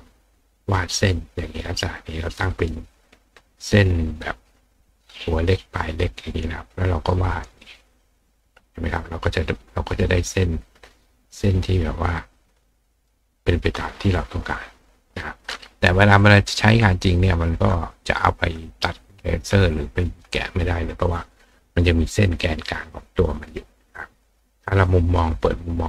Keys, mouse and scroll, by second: 6.5-8.0 drag, 9.4 click, 11.1 click, 12.4 click, 14.4 click, 15.1 click, 15.4-16.2 drag, 17.2 click, 17.8 click, 19.0 click, 22.6 click.